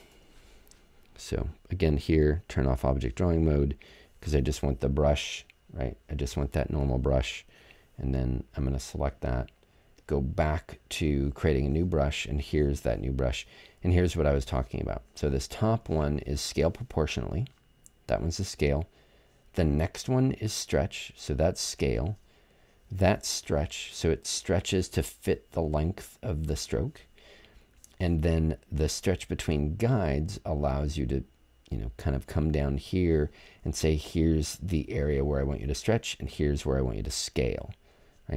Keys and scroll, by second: 0.1 BackSpace.